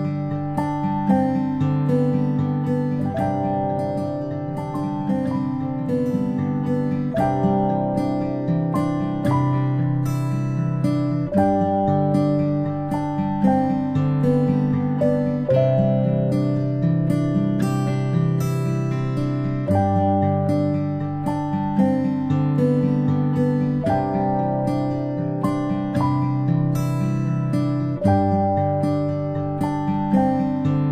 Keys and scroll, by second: 0.3 ctrl+z, 9.3 ctrl+z, 9.5 ctrl+z, 14.2 ctrl+z, 14.4 ctrl+z, 25.5 ctrl+s, 29.0 i.